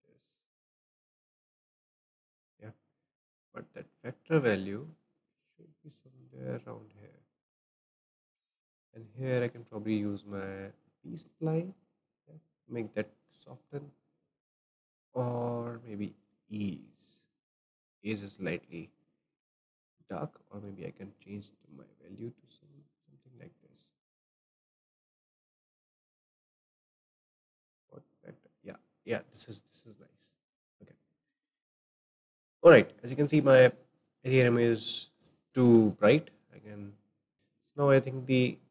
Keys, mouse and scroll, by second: 3.8-6.8 drag, 8.6 shift+middle click, 9.4-12.4 drag, 13.9-17.0 drag, 19.9-21.1 drag, 24.2-30.4 drag, 26.7-27.8 shift+middle drag, 31.1-34.9 shift+middle drag, 34.9-35.5 scroll down 1, 35.5 shift+middle click, 36.3 click, 37.3 ctrl+z, 37.3-38.7 middle drag.